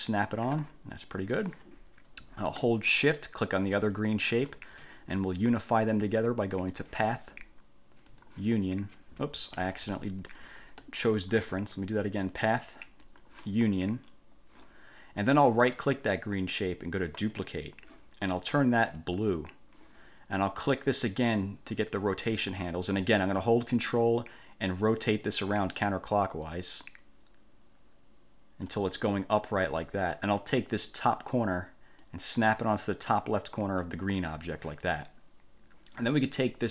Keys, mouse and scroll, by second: 3.9 shift+click, 7.1 click, 8.3 click, 9.7 ctrl+z, 10.5 click, 11.3 shift+click, 12.5 click, 13.2 click, 15.8 click, 17.3 click, 19.1 click, 21.3 click, 26.7-29.1 ctrl+drag, 32.2-34.2 drag.